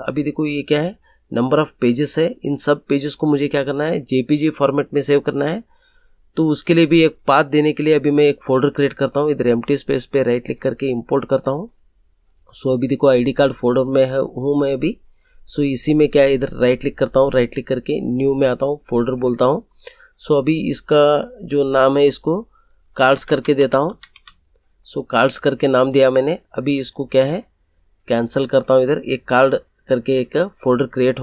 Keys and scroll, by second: 22.9-24.1 typing.